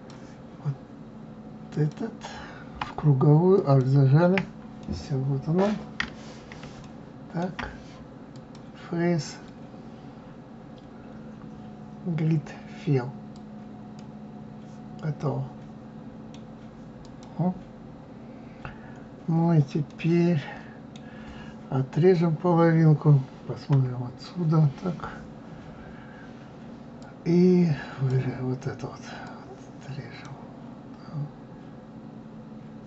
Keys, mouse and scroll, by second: 3.5 alt+click, 4.8-6.0 middle drag, 6.0-6.8 scroll down 1, 6.8-8.3 shift+middle drag, 8.3 click, 15.2-17.0 middle drag, 17.0 click, 17.9-19.9 scroll down 2, 19.9-22.9 middle drag, 23.7 KP_3, 27.0-29.4 drag.